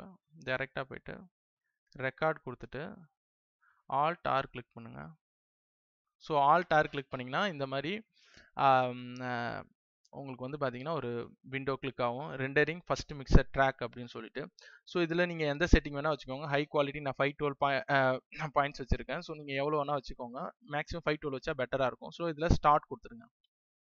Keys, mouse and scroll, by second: 5.2 alt+r, 15.2 click.